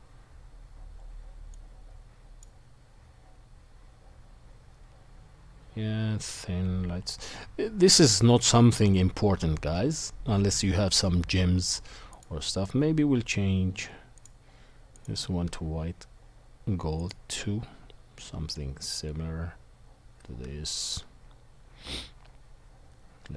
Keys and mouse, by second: 14.2 click, 14.2 middle click, 14.9-23.3 drag, 14.9-23.3 middle drag.